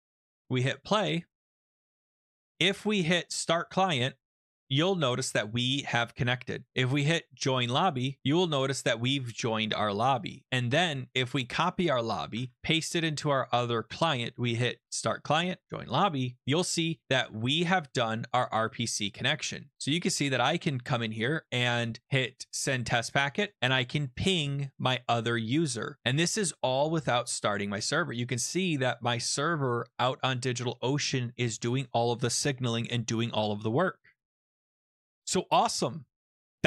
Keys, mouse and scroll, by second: 0.4 click, 1.8 click, 2.2 click, 3.1 click, 4.2 click, 8.6 click, 8.7 click, 10.0 ctrl+c, 11.3 click, 11.9 click, 12.4 ctrl+v, 14.4 click, 15.6 click, 17.3 alt+Tab, 17.4 alt+Tab, 17.4 click, 17.9 alt+Tab, 18.0 alt+Tab, 18.0 click, 19.9 click, 22.6 click, 23.1 click, 23.2 click, 23.4 click, 23.5 click, 24.2 click, 27.3 click, 29.6 click, 30.0-30.5 scroll down 3, 30.5-32.3 scroll up 4, 34.7 scroll down 1.